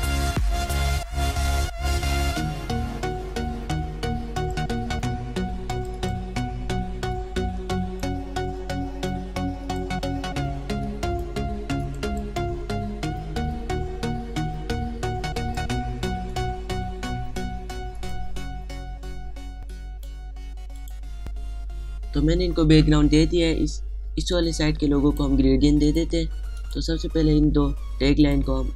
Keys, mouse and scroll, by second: 0.2 click, 3.0 space, 3.1 click, 3.2 space, 3.4-6.1 drag, 7.4 click, 7.8 shift+click, 9.8 alt+shift+click, 10.6-12.6 drag, 13.0-16.0 shift+drag, 20.1 click, 22.6 click, 23.4 space, 23.8 click, 23.9 space, 24.6 click, 25.3-25.9 alt+scroll down 2, 25.9 space, 26.0 click, 26.4 space, 27.1 click.